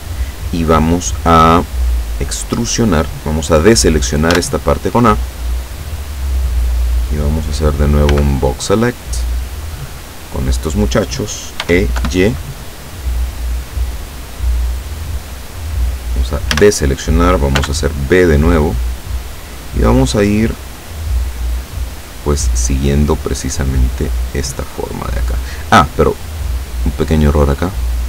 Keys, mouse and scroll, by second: 4.4 a, 8.2 b, 8.5-10.1 drag, 11.7 e, 12.1 y, 15.4 click, 16.6 a, 17.6 b, 18.5-19.7 drag, 20.2-26.4 drag, 27.1-28.0 drag.